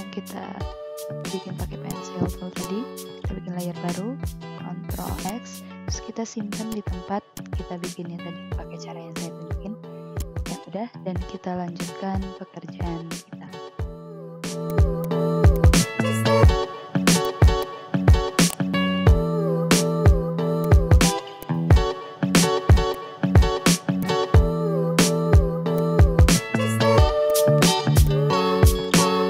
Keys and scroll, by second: 3.6 ctrl+v, 4.4 ctrl+z, 10.0 ctrl+z, 17.0 v, 20.3 ctrl+z, 21.2 ctrl+z, 23.6 ctrl+z.